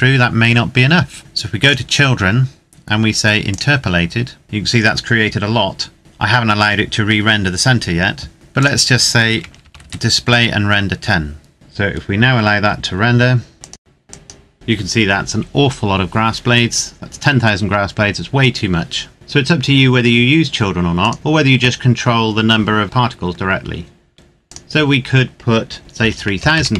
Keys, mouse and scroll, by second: 1.3 click, 1.7-3.1 scroll down 1, 3.1 click, 8.3 click, 9.1 KP_1, 9.3 KP_0, 9.5 KP_Enter, 13.5 click, 21.1 click, 22.8-23.8 scroll up 1, 24.6 click, 25.9 KP_3, 26.3 KP_0.